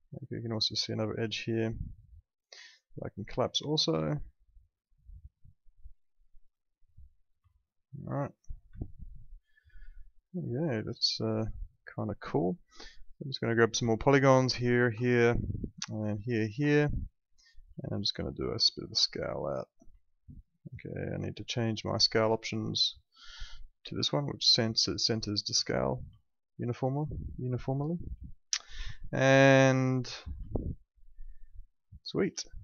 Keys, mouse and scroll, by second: 1.2 2, 2.0 click, 2.6 alt+middle click, 3.3 click, 7.5 alt+middle click, 8.8 alt+middle click, 11.2 alt+middle click, 12.3 alt+middle click, 13.4 click, 13.9 alt+middle click, 14.3 click, 14.7 ctrl+click, 15.0 alt+middle click, 16.0 ctrl+click, 16.7 alt+middle click, 18.4 click, 20.0 alt+middle click, 22.0 click, 25.1 click, 26.2 alt+middle click, 29.9 middle click, 30.4 alt+middle click, 32.0 middle click, 32.4 alt+middle click.